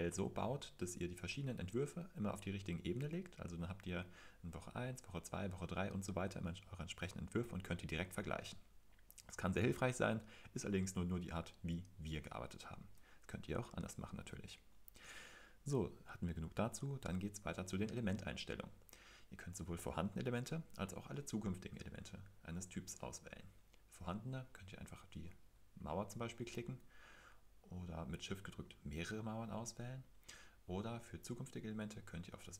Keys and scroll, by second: 25.4 Escape, 29.7 Escape, 30.4 Escape.